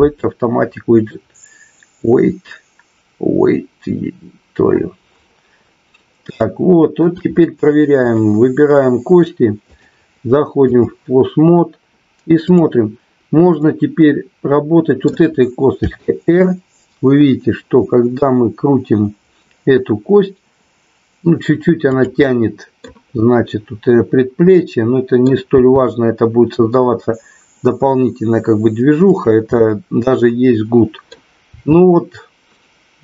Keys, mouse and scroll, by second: 6.4 shift+middle click, 7.9 click, 9.7-11.0 drag, 12.5 click, 13.6-15.1 middle drag, 15.8 r, 21.8 click, 22.3 middle click, 24.6-25.7 middle drag, 25.7 r, 29.2 click, 29.6-31.1 middle drag, 31.6 r.